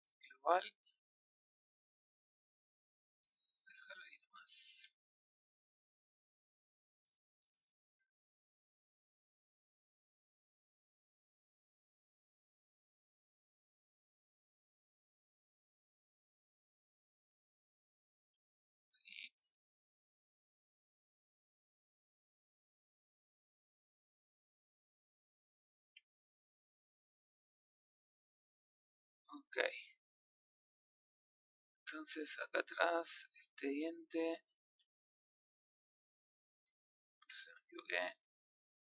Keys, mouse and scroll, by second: 0.6 middle click, 1.5 click, 3.1 click, 4.0 middle click, 4.6 r, 6.0 click, 7.3 click, 9.0 middle click, 9.8 click, 10.6-12.0 middle drag, 12.0 click, 14.2-15.2 drag, 15.2 scroll up 1, 15.3-17.2 middle drag, 17.2 click, 18.1 middle click, 18.3 z, 18.9-20.6 middle drag, 20.6 click, 23.8-24.1 scroll down 5, 24.1 middle click, 24.9-25.3 scroll down 1, 25.3 middle click, 25.8 a, 25.9 scroll up 1, 29.0 scroll up 6, 29.6-30.8 scroll down 1, 30.8 scroll down 2, 30.9 scroll up 1, 31.1 middle click, 32.1 scroll up 4, 32.5 middle click, 33.1 scroll up 2, 38.2 z.